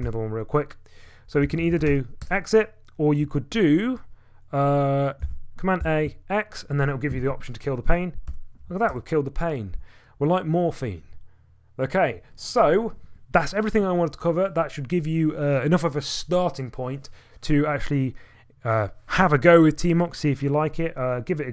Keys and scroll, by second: 0.0 typing, 1.2-2.8 typing, 4.0-4.7 typing, 5.2 ctrl+a, 5.8 x, 8.3 y, 8.9 Return.